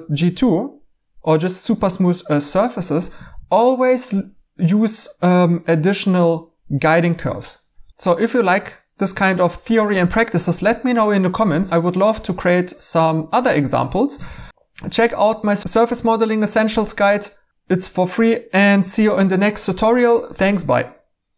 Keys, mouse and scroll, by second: 3.2 e, 14.2 e.